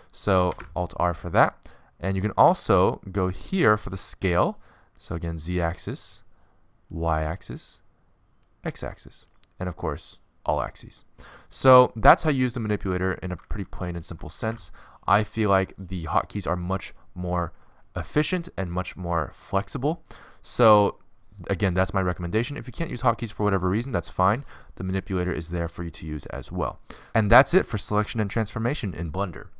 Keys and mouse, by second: 2.6 alt+r, 10.5 alt+s, 13.9 alt+s, 24.3 middle click.